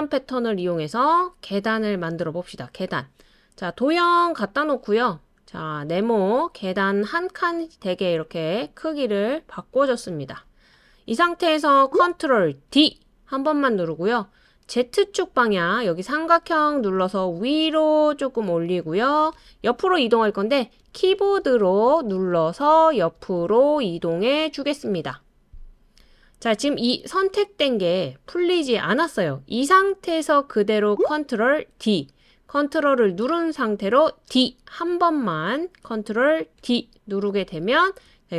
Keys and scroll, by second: 12.7 super+d, 21.2 Right, 21.4 Right, 21.6 Right, 21.8 Right, 22.1 typing, 31.7 super+d, 34.3 super+d, 36.6 super+d.